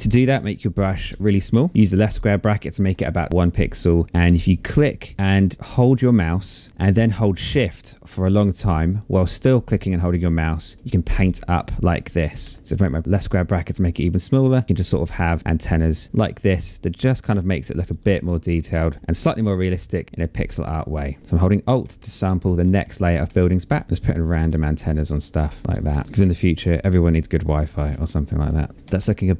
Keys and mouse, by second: 0.6 p, 4.2 click, 9.3 shift+click, 12.9 shift+click, 15.4 click, 16.8 click, 18.1 click, 19.0 click, 21.2 alt+click, 22.7 click, 23.8 click, 24.1 shift+click, 25.6 ctrl+z, 26.0 space, 26.2 click, 27.4 click, 28.4 space.